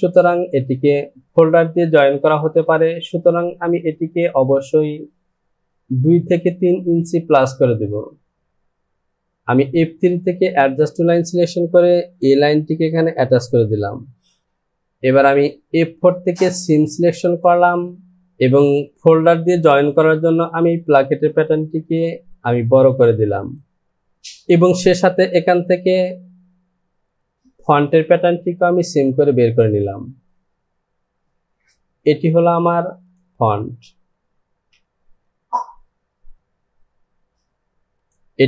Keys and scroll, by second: 34.8 j.